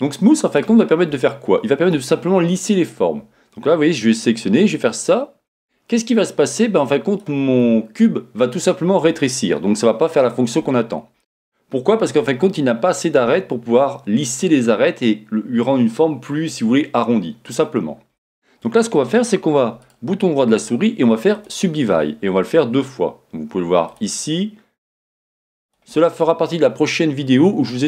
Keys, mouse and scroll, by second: 4.3 middle click, 19.8-23.9 right drag, 23.9 click, 25.6 click.